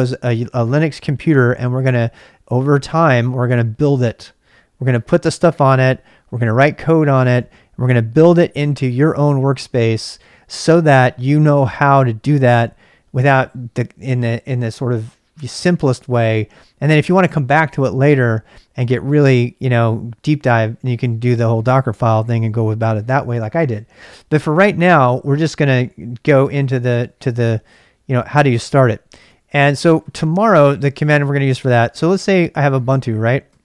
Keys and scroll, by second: 29.2 ctrl+c, 29.4-30.2 typing, 32.0 ctrl+[, 32.1-33.6 typing.